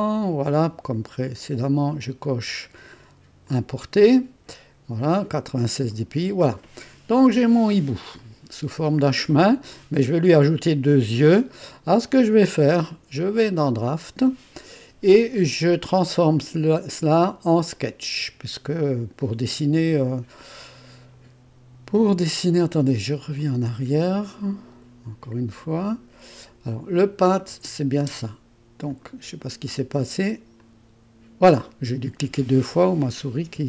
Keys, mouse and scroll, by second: 0.0 click, 1.4 click, 3.4 click, 5.1 click, 8.2 click, 12.9-14.5 drag, 17.8 click, 23.4 click, 25.5 click, 26.9 click, 27.5 space, 28.0 space, 28.9 click, 30.6 click.